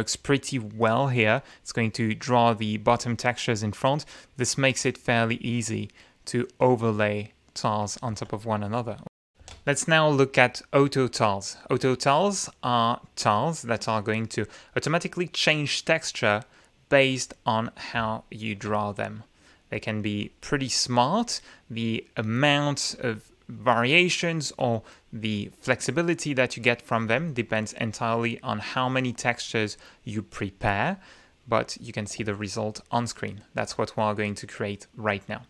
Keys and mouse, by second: 0.9 click, 1.5 click, 2.7 ctrl+z, 6.2 click, 7.4 click, 9.4 r, 10.1 click, 12.1-17.1 drag, 18.0-18.7 ctrl+shift+drag, 20.2 ctrl+click, 21.1 click, 22.9-25.2 drag, 27.0-28.7 drag, 28.8-29.4 drag, 32.5-33.7 ctrl+shift+right drag.